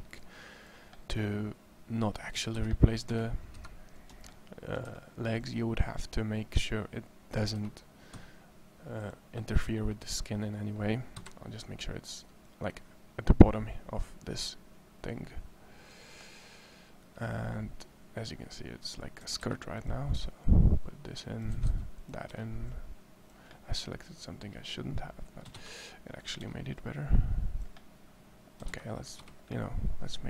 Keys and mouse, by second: 2.1 a, 2.3 a, 3.3 c, 3.3 KP_3, 4.7 c, 8.0 e, 11.0 KP_1, 12.5-14.2 drag, 14.9-16.1 drag, 16.1-17.1 middle drag, 19.0 a, 19.2 a, 20.2 c, 21.3 a, 21.5 c, 25.3 a, 25.4 c.